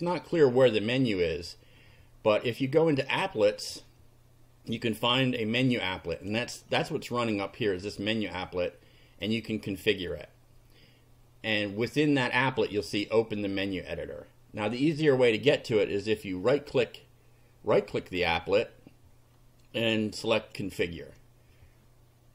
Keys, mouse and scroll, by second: 2.9 click, 5.2 scroll down 1, 6.2 click, 9.2 click, 14.8 click, 20.3 click.